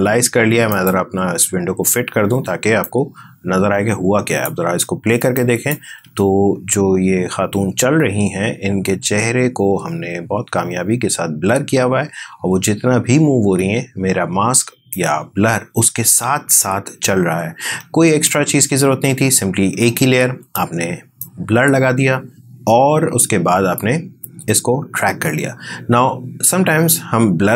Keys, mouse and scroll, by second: 5.9 space, 14.7-20.5 drag, 21.0-27.5 drag.